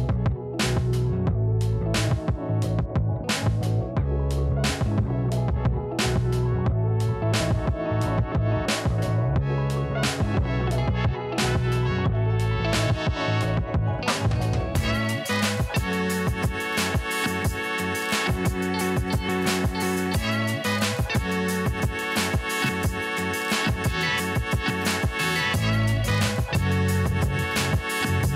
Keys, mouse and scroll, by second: 0.1-1.4 scroll down 1, 2.7 alt+Num_Lock, 2.7 scroll down 2, 3.6 alt+scroll up 1, 4.1-4.7 scroll down 1, 4.7 scroll up 1, 5.0-5.7 alt+scroll down 1, 7.2 right click, 7.9 click, 9.7 ctrl+j, 14.3 ctrl+j, 14.4 shift+click, 15.3 ctrl+t, 16.3-17.7 drag, 18.3-20.1 alt+drag, 20.1 Right, 22.1 click.